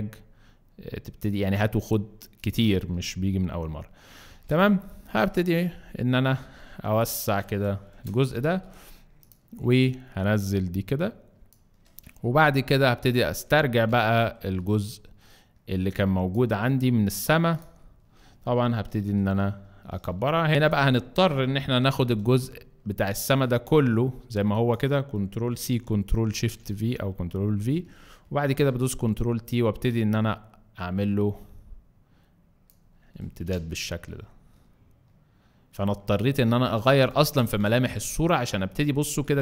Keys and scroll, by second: 4.3 ctrl+t, 5.0 ctrl+alt+t, 5.7 ctrl+alt+shift+t, 7.9 ctrl+alt+shift+Return, 18.8 ctrl+t, 20.3 Escape, 21.8 m, 25.5 ctrl+c, 26.0 ctrl+shift+c, 26.4 ctrl+shift+v, 28.4 ctrl+t, 37.2 Return, 37.9 alt+Return, 39.3 alt+space.